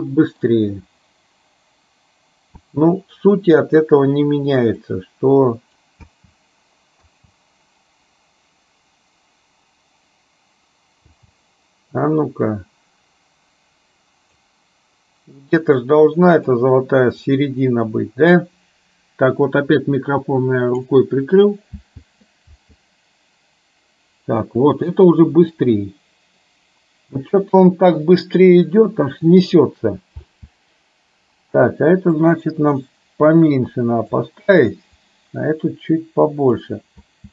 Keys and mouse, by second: 2.7 space, 4.9-6.0 drag, 6.1 space, 7.1 space, 11.2 space, 12.3-14.4 drag, 15.3-16.6 drag, 17.5-20.9 drag, 21.9 space, 22.6 space, 30.3 space, 32.2-34.3 drag, 35.0-36.6 drag, 37.2 space.